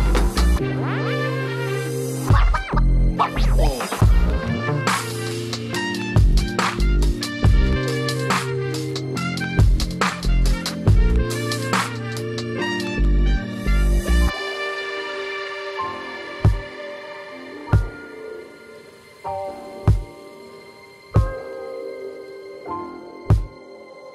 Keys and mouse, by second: 0.5 KP_3, 1.0-2.9 drag, 4.2 right click, 4.3 space, 8.0 right click, 8.6 right click, 8.8 right click, 9.6-10.8 right drag, 11.0-12.1 right drag, 12.6 space, 15.0 space, 16.0 space, 18.3 space, 18.4 click, 18.4 space, 18.8-20.9 drag, 19.5 space, 21.5-22.7 drag, 22.9-23.3 drag, 23.9 click.